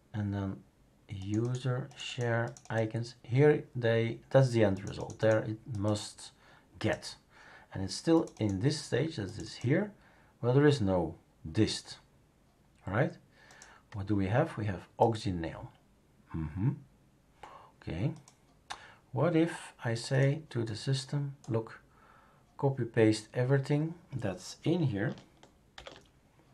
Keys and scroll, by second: 25.7 typing.